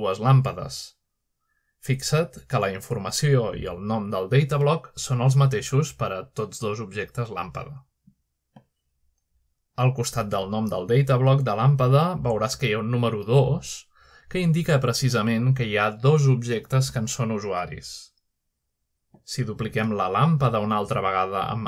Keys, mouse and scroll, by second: 3.6 click, 5.3-6.2 drag, 8.6-9.5 drag, 11.1-11.8 shift+middle drag, 11.8 click, 12.0 g, 13.0 click, 18.1 click, 18.9-21.6 drag.